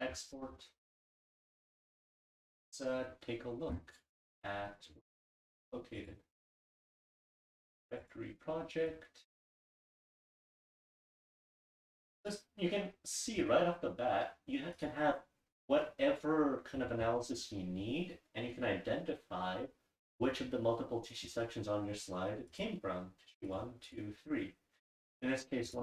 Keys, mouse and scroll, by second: 6.0 click, 6.7 right click.